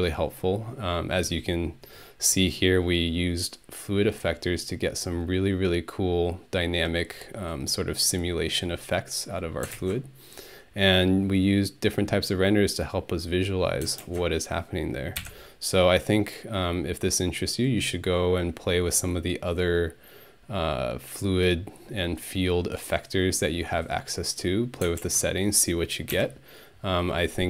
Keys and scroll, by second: 15.2 ctrl+Home, 26.1 ctrl+Home.